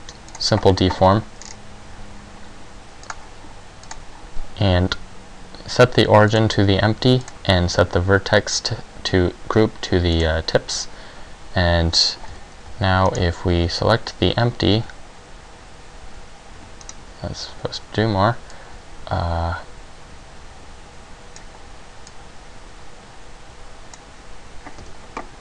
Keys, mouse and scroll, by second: 1.5-3.1 scroll down 1, 3.1 click, 3.1 scroll down 3, 4.1 click, 7.4 click, 12.4-14.9 typing, 13.3 right click, 17.1 right click, 18.7 click, 22.2 click, 24.9 z.